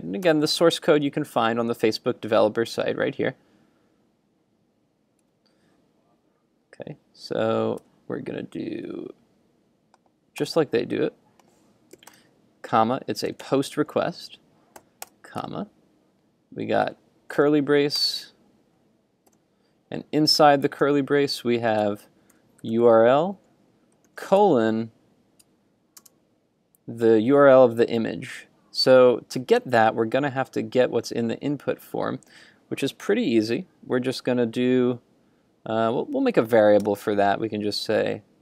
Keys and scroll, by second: 0.8 super+Tab, 5.2 super+Tab, 8.0 super+Tab, 8.9 super+Tab, 15.4 super+Tab, 21.0 super+Tab, 25.5 super+Tab.